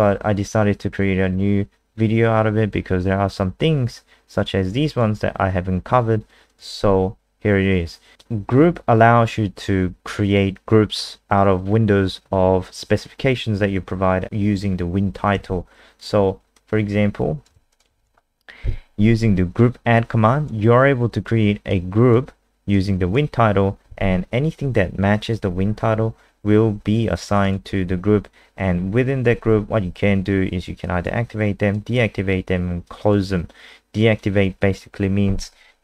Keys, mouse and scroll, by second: 4.4 click, 17.5 ctrl+c, 17.7 click, 17.9 ctrl+v, 19.9 click, 27.4 click, 30.8 click.